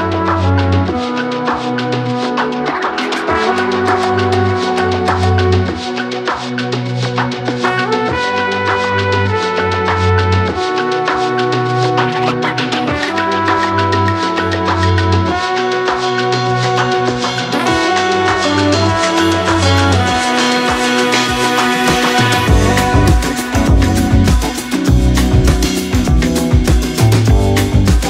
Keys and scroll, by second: 4.3 x, 4.5 x, 6.3 8, 6.3 Return, 10.6 ', 11.3 6, 11.4 Return, 11.7 7, 12.3 shift+c, 13.6-15.2 typing, 24.5 Delete, 25.0 Delete.